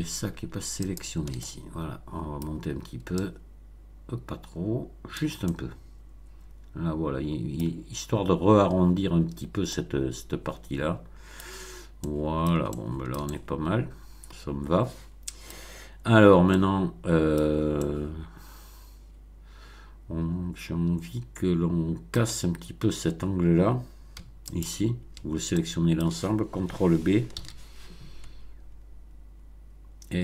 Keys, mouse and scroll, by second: 0.7 shift+click, 1.3-2.5 shift+middle drag, 3.1-5.3 drag, 5.4-7.7 middle drag, 9.7-11.4 middle drag, 11.4 scroll down 1, 12.0-12.6 middle drag, 12.7-15.6 shift+middle drag, 16.1 Tab, 16.4-17.5 middle drag, 17.4 Tab, 17.7-22.2 middle drag, 24.4 alt+click, 25.5 alt+middle click, 27.3 ctrl+b.